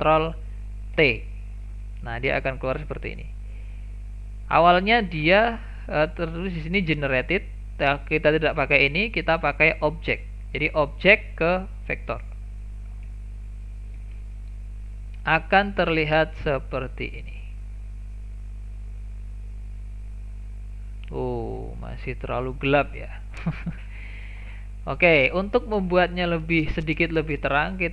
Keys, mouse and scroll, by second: 1.0 ctrl+t, 5.2-5.7 scroll up 7, 5.7-8.7 middle drag, 10.0 click, 11.0 click, 12.9-13.4 scroll down 3, 13.4 shift+middle click, 13.9 scroll down 2, 14.1-15.8 shift+middle drag, 15.8 click, 20.5-21.3 middle drag, 21.3-21.7 scroll up 3, 21.7-22.6 shift+middle drag, 22.6 scroll down 1, 22.8 shift+middle click, 23.2-24.9 scroll down 1, 24.9-25.2 scroll down 1, 25.2-26.4 middle drag, 26.4 click, 27.2 shift+a.